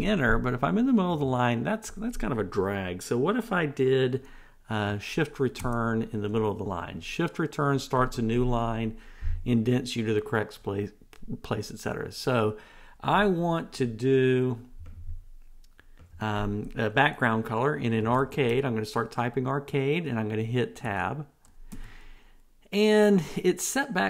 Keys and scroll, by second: 5.8 shift+Return, 21.1 Tab.